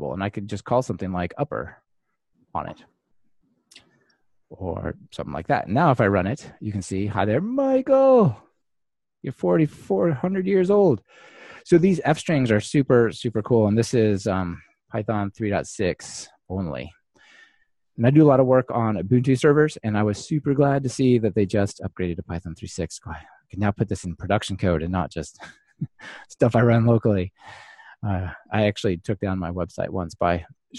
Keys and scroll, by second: 5.6 ctrl+r.